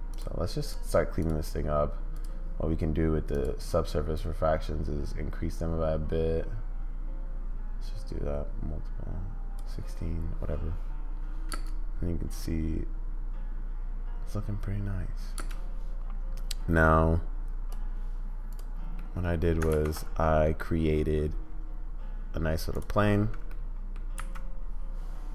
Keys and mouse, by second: 0.6 click, 1.2 click, 2.1 click, 3.3 click, 4.1-9.5 drag, 11.6 space, 15.3 space, 16.3-17.7 drag, 19.0 middle click, 19.7 shift+a, 23.6 middle click, 24.1 s.